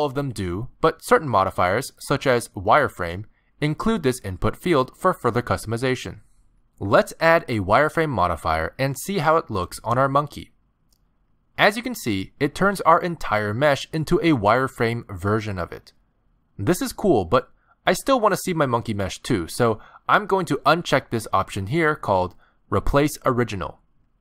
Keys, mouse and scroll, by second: 1.3 click, 2.0 click, 10.8-11.2 scroll up 1, 11.2 middle click, 11.9 scroll up 1, 12.8 alt+a, 13.5 middle click, 20.2 click, 24.1 click.